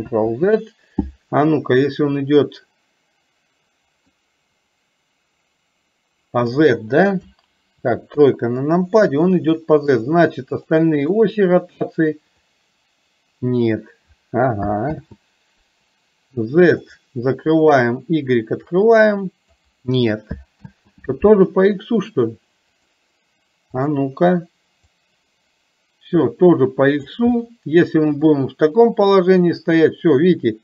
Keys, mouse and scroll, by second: 4.2-6.4 middle drag, 8.2 KP_3, 10.1 click, 10.6 click, 12.4 click, 12.7-13.8 drag, 16.9 click, 17.6 click, 18.7 click, 22.8 click, 23.8 click, 24.9-27.2 drag, 27.4 middle click, 28.8-30.6 drag.